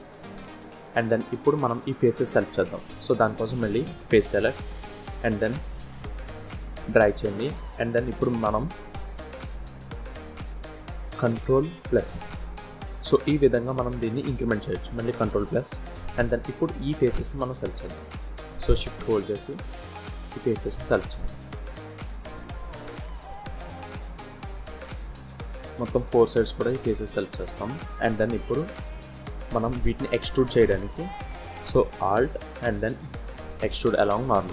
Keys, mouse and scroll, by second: 0.1 middle click, 1.9 shift+middle click, 3.7 click, 4.8 click, 7.3 middle click, 7.9 middle click, 8.7 middle click, 11.9 ctrl+KP_Add, 14.5 ctrl+KP_Add, 15.7 middle click, 17.0 shift+click, 18.6 middle click, 19.6 shift+click, 20.0 middle click, 21.0 shift+middle click, 21.7 middle click, 22.4 shift+click, 23.0 middle click, 23.7-24.0 scroll down 2, 24.2 shift+middle click, 24.9 middle click, 26.0 shift+click, 27.2 middle click, 27.5 scroll up 1, 28.5-28.9 scroll down 3, 28.9 middle click, 29.7 shift+scroll up 1, 29.8 shift+middle click, 30.6 scroll up 1, 31.1 shift+middle click, 32.4 alt+e.